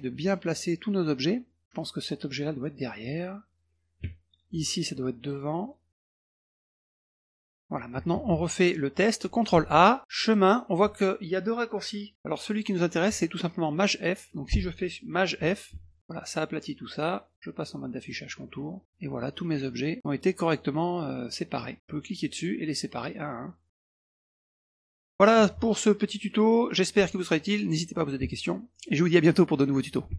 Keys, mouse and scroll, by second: 0.2 middle click, 0.6 middle click, 1.3 middle click, 2.3 click, 2.7 middle click, 3.5 click, 4.3 shift+click, 5.4 click, 5.7 click, 6.6 middle click, 6.9 middle click, 7.1-7.7 middle drag, 8.7 middle drag, 9.5 ctrl+a, 10.2 click, 14.3 click, 15.7 shift+f, 16.0 click, 17.3 click, 18.0 click, 18.6 click, 18.8 middle click, 19.2 middle click, 19.4 middle click, 19.5 middle click, 19.7 middle click, 20.0 middle click, 20.1 middle click, 20.6 middle click, 21.3 middle click, 21.9-22.2 drag, 22.8 drag, 23.7 click, 24.5 drag, 26.0 middle click, 26.5 middle click, 30.1 Tab.